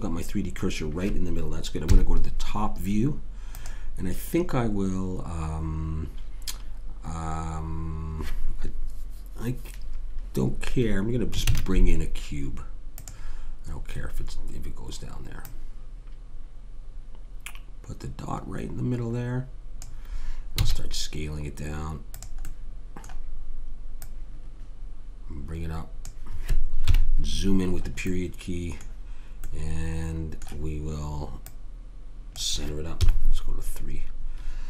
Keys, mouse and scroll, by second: 1.8 KP_7, 2.0 middle click, 11.5 shift+a, 15.4-17.3 drag, 20.6 s, 24.0 click, 26.8 KP_Decimal, 31.4 click, 33.0 KP_3.